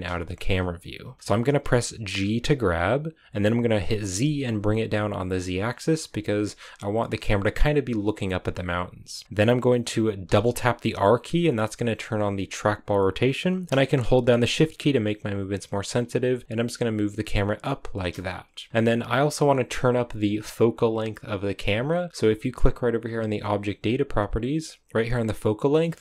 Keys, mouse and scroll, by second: 2.2 g, 10.2 r.